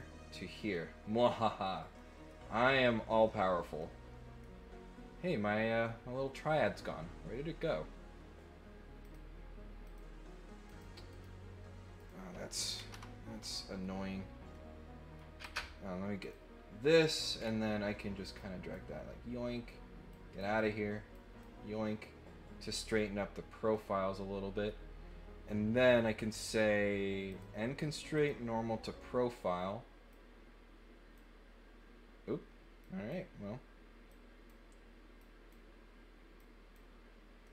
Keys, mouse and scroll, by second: 0.7 middle click, 1.9 middle click, 3.8 middle click, 9.0 click, 9.8 click, 10.6 click, 11.1 right click, 11.9 click, 14.5 middle click, 14.5-15.1 scroll up 1, 16.2 click, 17.3 middle click, 17.3 scroll down 1, 18.3 click, 20.1 click, 21.1 click, 23.7 middle click, 26.3 click, 27.3 click, 28.1 click, 30.1-31.1 drag, 32.8 click, 34.1 click, 35.2 click, 36.3 click, 37.4-37.5 middle drag.